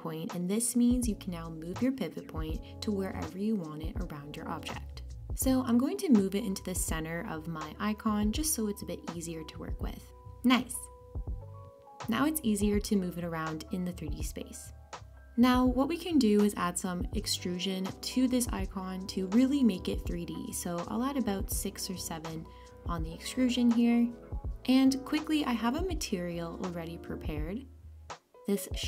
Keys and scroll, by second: 12.0 super+z.